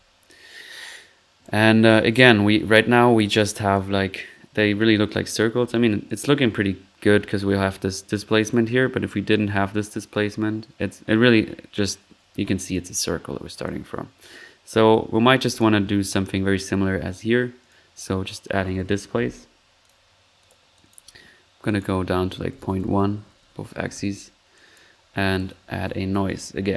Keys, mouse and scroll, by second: 0.4 middle click, 0.7 typing, 0.9-1.7 drag, 2.4-3.0 typing, 5.5 typing, 18.2-19.2 typing, 25.5-26.7 typing.